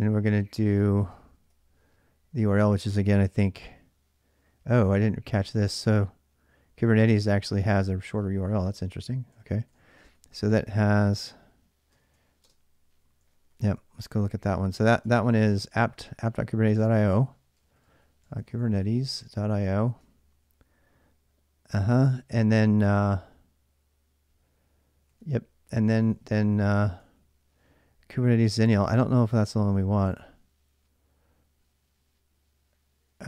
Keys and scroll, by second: 0.7-1.6 typing, 8.3 ctrl+a, 8.5 ctrl+a, 9.2 ctrl+[, 9.5 l, 9.8 l, 10.1 l, 10.3 l, 11.5-13.5 typing, 13.1 ctrl+[, 13.1 ctrl+h, 14.5 i, 14.9 ctrl+a, 15.1 ctrl+a, 16.8 ctrl+a, 17.1-20.5 typing, 24.9 ctrl+a, 25.7-26.8 typing, 26.8 ctrl+a, 27.0 ctrl+a.